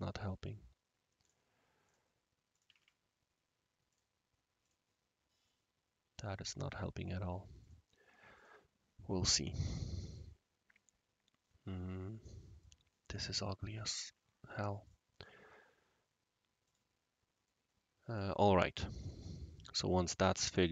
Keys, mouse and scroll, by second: 1.2 click, 1.4 typing, 1.8 click, 2.5 click, 2.6 typing, 3.9 shift+click, 4.6 shift+click, 5.4-6.6 shift+right drag, 7.6 shift+click, 8.3 click, 9.6 scroll up 1, 9.6 scroll down 1, 10.1-12.6 right drag, 12.6-13.2 shift+drag, 14.8-15.3 shift+drag, 16.6 shift+drag, 17.1 scroll down 1, 17.1 scroll up 1, 17.4-18.2 right drag, 18.3-18.9 scroll down 2, 18.9-19.2 scroll up 1, 19.2-19.5 middle drag.